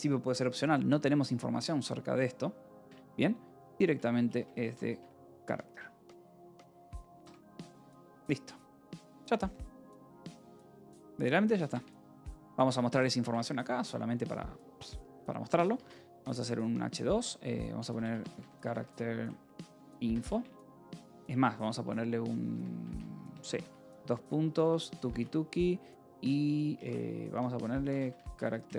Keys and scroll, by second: 2.7 BackSpace, 4.2-6.6 typing, 6.8 Escape, 7.8 ctrl+s, 7.8-10.8 typing, 11.6 Return, 12.1-13.6 typing, 14.9 h, 15.8 2, 16.1 Return, 17.7-25.6 typing, 27.2-28.7 typing.